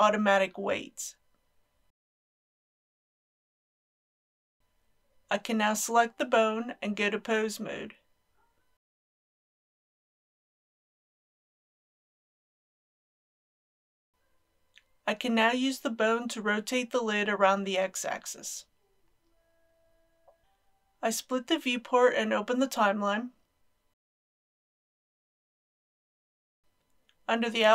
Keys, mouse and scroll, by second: 2.0 click, 13.0-14.3 middle drag, 14.5 click, 15.5 r, 15.7 x, 18.8 click, 19.5 ctrl+z, 20.4-23.5 drag, 26.6-26.9 scroll up 1.